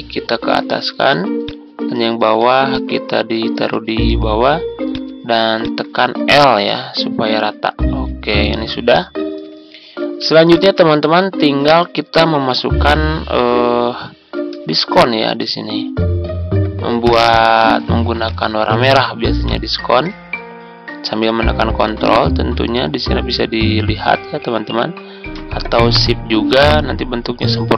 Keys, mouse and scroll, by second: 2.6 shift+click, 5.5 shift+click, 6.6 i, 8.9 click, 10.4 click, 10.9-11.2 ctrl+scroll down 1, 14.5 z, 14.9-27.7 drag.